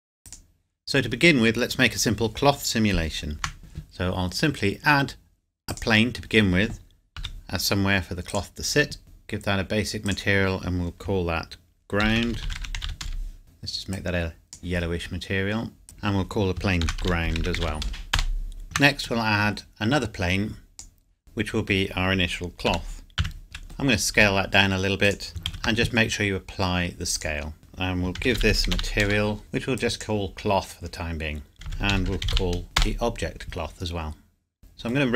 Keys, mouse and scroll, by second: 0.3 click, 3.3 shift+a, 5.8 click, 7.2 s, 8.3 click, 12.0-12.9 typing, 13.0 Return, 13.4 click, 16.8-18.6 typing, 18.2 Return, 20.7 click, 22.7 g, 23.2 z, 23.4 middle click, 24.2 s, 25.0 click, 25.5 ctrl+a, 27.2 click, 28.2-28.8 typing, 29.0 Return, 29.4 click, 31.1 scroll down 1, 31.5 click, 31.6-32.3 typing, 32.8 Return, 34.6 middle click.